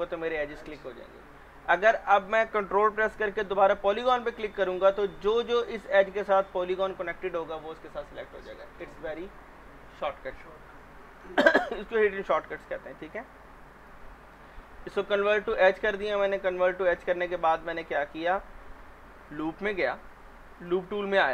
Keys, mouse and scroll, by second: 4.5 ctrl+click, 10.3 scroll down 1, 11.0 alt+middle click, 12.5 click, 15.1 ctrl+click, 16.3-21.3 middle drag.